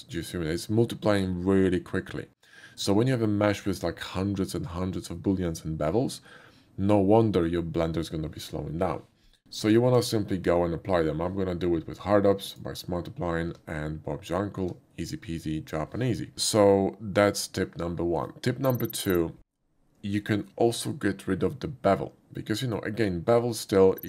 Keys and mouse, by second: 9.2 click, 12.2 q, 12.4 click, 13.8 Tab, 20.4 middle click.